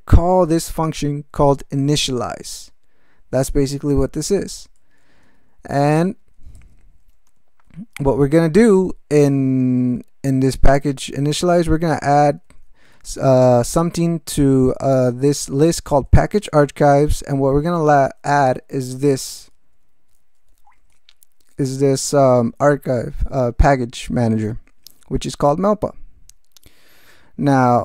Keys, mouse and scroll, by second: 0.1 ctrl+g, 3.6 alt+m, 4.8 ctrl+f, 6.2 ctrl+n, 6.5 ctrl+alt+m, 7.1 ctrl+alt+space, 7.5 ctrl+e, 7.9 ctrl+g, 9.2 alt+b, 10.8 alt+f, 11.8 alt+f, 12.2 alt+b, 12.8 alt+f, 13.5 alt+b, 15.3 alt+f, 15.8 alt+b, 16.7 alt+f, 18.3 ctrl+f, 18.6 ctrl+space, 18.9 ctrl+e, 19.6 ctrl+b, 20.6 ctrl+g.